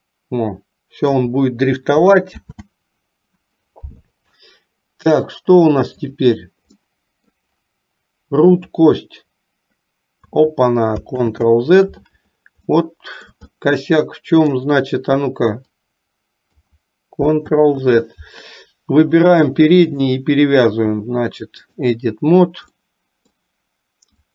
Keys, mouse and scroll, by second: 2.6 ctrl+z, 6.1 click, 7.0 middle click, 8.9-10.6 drag, 11.2 ctrl+z, 12.8 middle click, 13.7-14.8 middle drag, 15.9 click, 17.6 ctrl+z, 20.0-22.1 drag, 23.0 middle click.